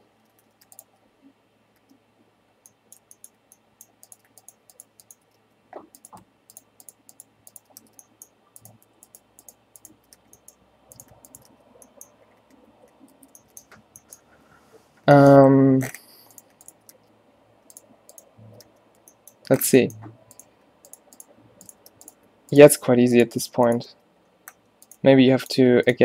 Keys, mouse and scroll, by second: 0.4 ctrl+z, 1.9 f, 5.5 f, 7.9 f, 10.3 f, 11.6 f, 12.4 a, 12.7 a, 13.3 ctrl+n, 17.0 f, 18.8 f, 22.0 f, 24.0 f, 25.1 g.